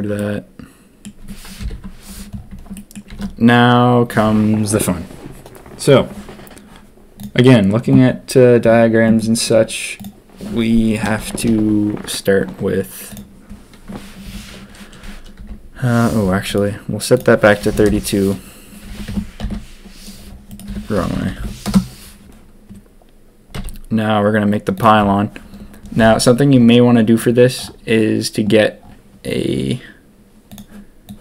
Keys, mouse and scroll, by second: 0.1-1.0 drag, 1.5 ctrl+KP_1, 2.7 shift+drag, 3.0 shift+a, 11.3 shift+a, 14.2 r, 17.1-18.3 drag, 18.8 r, 20.6 r, 23.5 s.